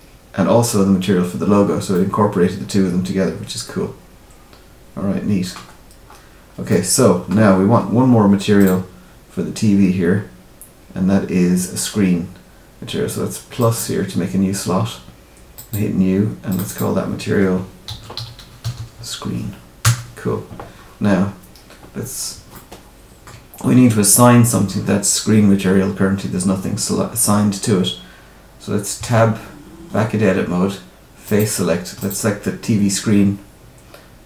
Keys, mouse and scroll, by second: 1.9 middle click, 5.6-6.6 scroll down 7, 6.6 middle click, 7.4 scroll down 2, 8.5 click, 13.5 click, 15.5 click, 16.4 click, 18.7 e, 22.5 shift+middle click, 28.9 Tab, 31.2 click, 31.9 click.